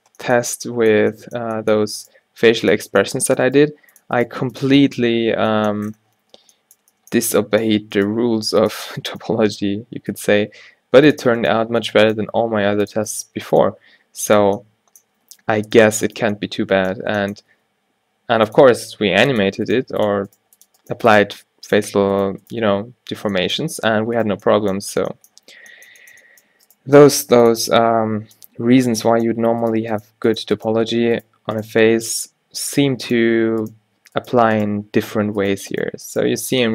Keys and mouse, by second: 0.1 f, 0.5 Tab, 1.1 Tab, 2.2 g, 3.3 g, 3.6 g, 4.3 g, 8.0-10.9 drag, 8.3 g, 9.5 g, 10.4 g, 11.5-14.5 drag, 11.7 g, 12.5 g, 13.3 g, 13.9 g, 17.6 e, 18.7 e, 19.9 g, 20.5 g, 21.0 g, 22.7 f, 23.2 Tab, 23.9 Tab, 27.0 g, 30.9 f, 34.3-36.7 drag, 35.1 f.